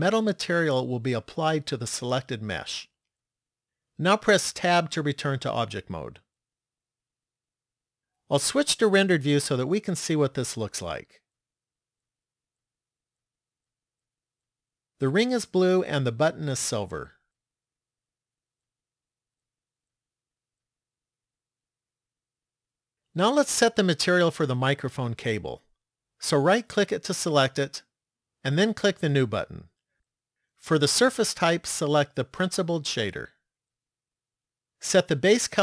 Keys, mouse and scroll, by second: 4.6 Tab, 7.5 click, 19.1 click, 22.6 middle click, 26.6 right click, 28.5 click, 30.6 click, 34.9 click.